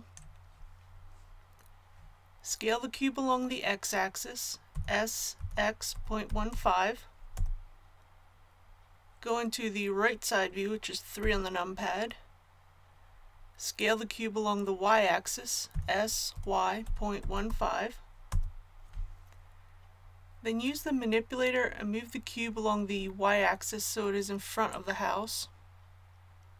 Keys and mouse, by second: 4.7 s, 11.2 KP_3, 15.7 s, 24.7-26.5 drag.